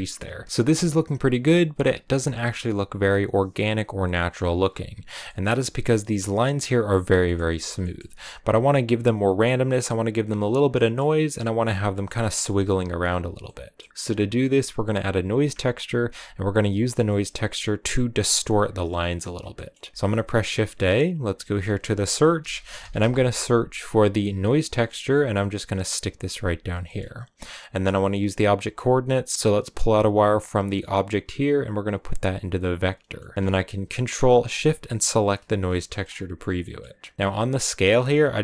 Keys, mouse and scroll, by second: 0.4 scroll down 1, 4.9 scroll down 3, 5.1 middle click, 5.3-6.9 scroll up 3, 6.9 middle click, 7.5 scroll down 1, 7.7-17.2 middle drag, 17.2-18.4 scroll up 1, 18.8 scroll down 1, 27.3-32.5 drag, 35.0 ctrl+shift+click, 37.1-38.4 middle drag.